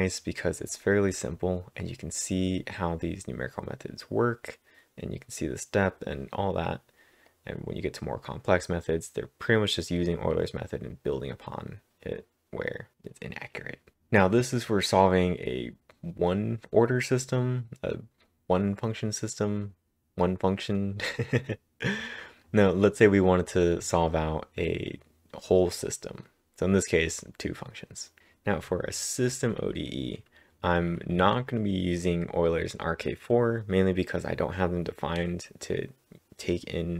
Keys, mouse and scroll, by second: 0.7-1.4 scroll up 7, 1.8-2.9 scroll up 4, 2.9-3.7 scroll up 5, 5.2-5.6 scroll up 1, 7.3-10.4 drag, 14.6-19.9 drag, 14.6-14.9 scroll up 1, 21.9-27.9 drag, 21.9 scroll up 1, 24.3-25.0 typing, 26.2-26.6 scroll down 1, 27.9 scroll down 13.